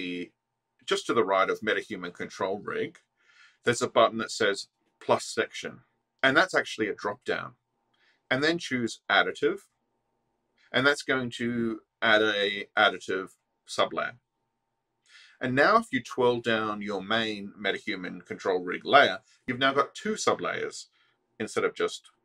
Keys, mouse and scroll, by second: 6.6 click, 10.5 click, 20.1 click.